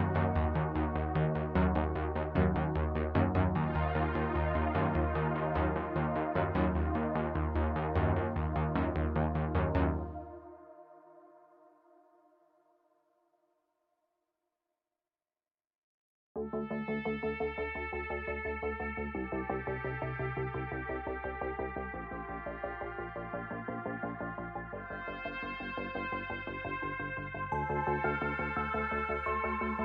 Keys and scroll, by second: 0.6 Tab, 4.2 Tab, 4.6 s, 5.4 Tab, 6.6 g, 9.3 Tab, 10.2 1, 12.1 l, 12.6 x, 13.1 Tab, 14.7 ctrl+j, 16.4 g, 18.2 g, 21.5 typing, 25.4 g, 25.6 z, 28.9 shift+a.